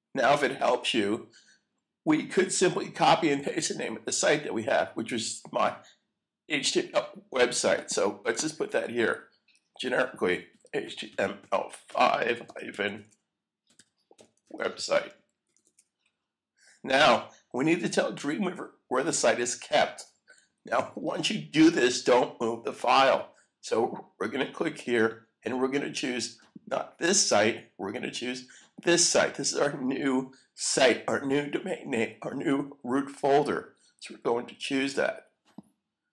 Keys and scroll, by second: 10.3-16.1 typing, 17.6 e.